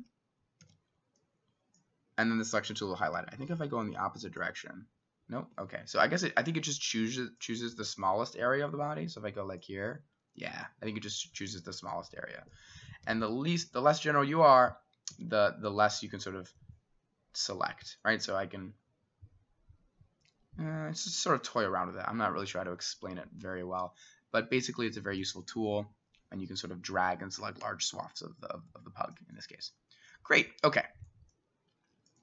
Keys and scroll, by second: 0.0 Escape, 0.6 s, 3.0 Escape, 3.3 s, 5.6 Escape, 5.9 s, 8.2 Escape, 10.6 Escape, 12.4 Escape, 13.0 Escape, 15.2 s, 22.4 s.